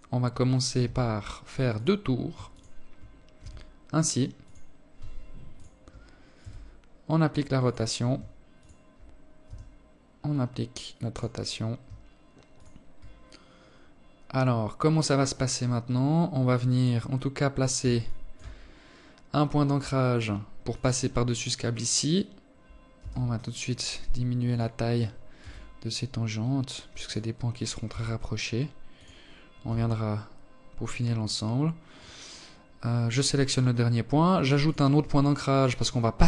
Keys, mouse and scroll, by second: 1.0 ctrl+click, 1.9 r, 4.0 ctrl+click, 4.9 r, 7.1 ctrl+click, 8.0 r, 11.0 ctrl+click, 16.6 alt+shift+click, 17.1 scroll up 4, 19.2 ctrl+click, 21.5 s, 23.4 right click, 23.9 s, 26.4 g, 28.3 r, 30.5 right click, 33.2 ctrl+click.